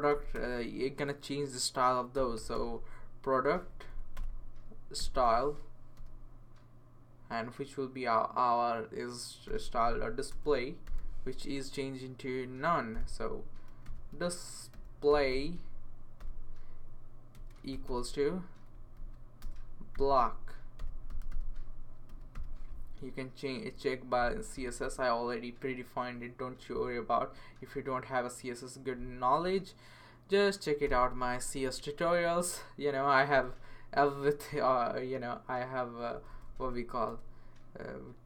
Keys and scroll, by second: 0.1 typing, 0.3 Return, 1.9-3.0 typing, 3.7 Down, 4.1 Return, 4.7-6.5 typing, 9.2-11.5 typing, 12.9-15.2 typing, 16.2 Return, 17.3-22.6 typing, 30.8 ;, 33.3 Return, 34.4 Right, 36.0 BackSpace, 36.1 BackSpace, 36.3 BackSpace.